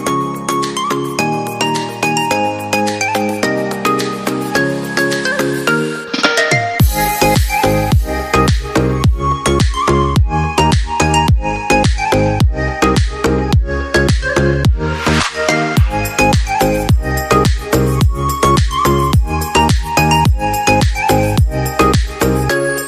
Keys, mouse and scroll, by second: 14.9 right click, 16.7 Down.